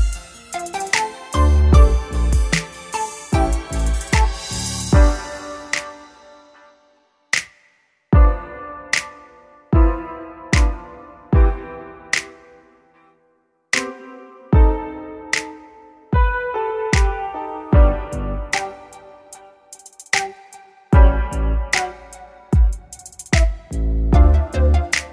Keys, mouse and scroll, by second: 2.1 a, 2.6-4.6 middle drag, 4.6-6.6 drag, 5.8 right click, 6.6-8.4 middle drag, 8.0 click, 8.4 right click, 9.2-12.3 middle drag, 9.2-10.4 drag, 11.2 e, 17.1 KP_1, 18.0 z, 18.7 e.